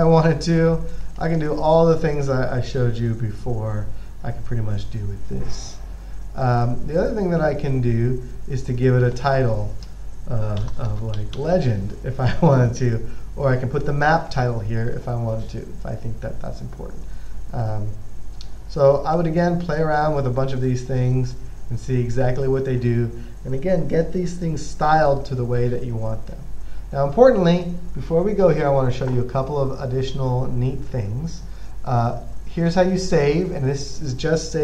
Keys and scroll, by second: 10.6-12.1 typing.